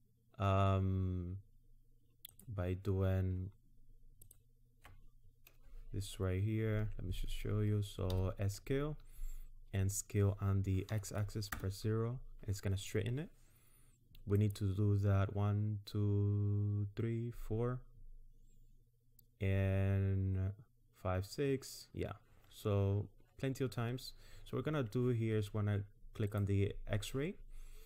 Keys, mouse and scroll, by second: 2.3 click, 4.2 alt+click, 8.1 s, 26.3 click.